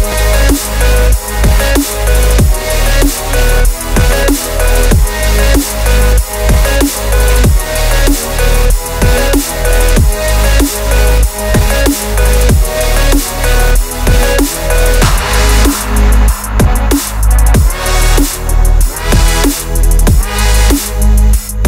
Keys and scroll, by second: 0.0 shift+x, 0.1 shift+t, 17.4 ctrl+z.